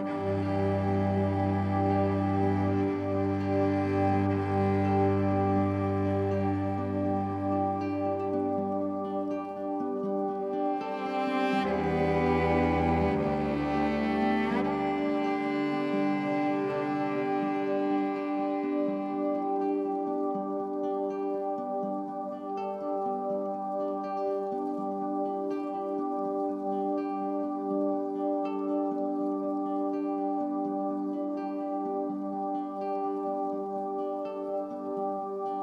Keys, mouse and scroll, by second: 0.0 Tab, 1.3 Left, 1.4 Left, 1.6 Left, 1.8 Left, 8.0 click, 8.6 Tab, 9.1 ctrl+a, 10.2 ', 11.2 Tab, 12.6 g, 13.8-14.8 drag, 14.8-16.5 typing, 15.9 click, 18.5 click, 19.3 typing, 20.5 typing, 21.4 click, 22.4 ctrl+alt+click, 23.7-24.9 alt+shift+drag, 25.5-26.3 typing, 31.9-32.8 drag.